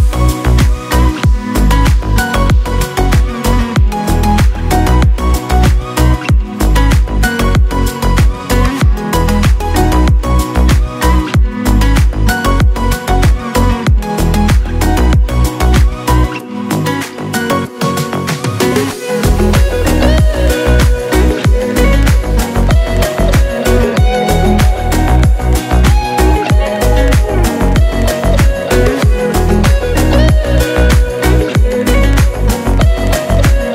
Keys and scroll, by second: 4.1 ctrl+z, 4.9-5.9 typing, 8.2 [, 8.3 [, 8.7 ctrl+z, 8.8 ], 10.9 Tab, 12.7 Tab, 13.3 ctrl+z, 14.0 [, 14.4 [, 15.4 ], 16.1 ctrl+z, 16.3 ], 17.8-18.3 typing, 20.2 ], 20.3 ], 20.6 ], 21.9-23.3 typing, 22.3 ctrl+z, 23.3 ctrl+z, 27.3 Tab.